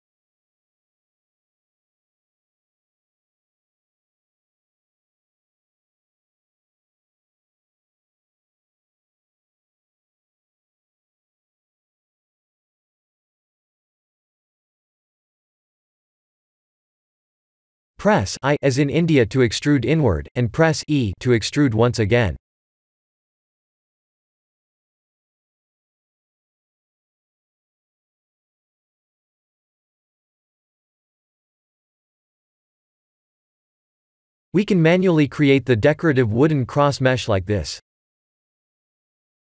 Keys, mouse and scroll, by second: 0.8 Tab, 1.2 shift+z, 1.9 scroll up 3, 2.9 KP_3, 4.3 g, 6.6 ctrl+z, 7.4 middle click, 7.5 middle click, 8.3 scroll down 2, 8.8 middle click, 9.2 middle click, 10.6 click, 11.0 middle click, 11.1 middle click, 11.4 middle click, 13.4 middle click, 15.0 click, 16.9 Tab, 17.5 3, 17.7 click, 18.3 middle click, 18.5 middle click, 19.5 i, 24.4 middle click, 24.7 middle click, 24.7 middle click, 25.2 e, 26.5 Tab, 26.9 middle click, 27.1 middle click, 27.2 middle click, 27.3 middle click, 27.5 middle click, 27.7 middle click, 27.9 shift+z, 28.2 middle click, 28.4 middle click, 29.0 shift+z, 29.4 middle click, 29.6 middle click, 30.1 middle click, 34.6 click, 35.4 shift+a, 38.9 KP_1.